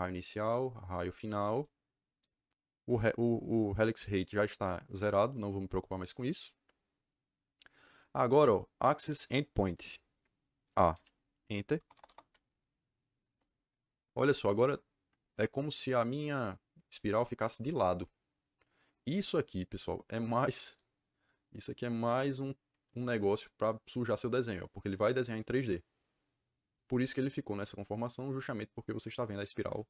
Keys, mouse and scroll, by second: 0.0 click, 1.1 click, 10.6-12.2 typing, 13.2 Return, 20.6 click.